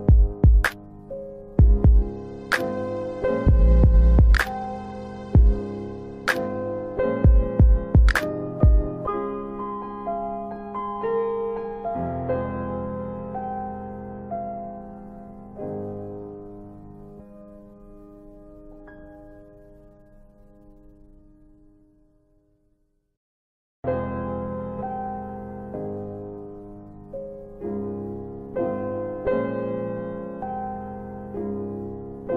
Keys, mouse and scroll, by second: 0.6 alt+middle click, 1.3 middle click, 2.1 F4, 2.9 alt+middle click, 5.8 click, 6.5 alt+middle click, 7.7 alt+middle click, 8.3 scroll down 1, 8.5 middle click, 9.1 scroll down 1, 9.6 middle click, 10.6 click, 14.6 click, 16.7 click, 17.1 double click, 20.5 click, 23.8 middle click, 27.1 click, 28.4 middle click, 28.9-29.4 scroll up 1, 29.4 middle click, 30.2 click.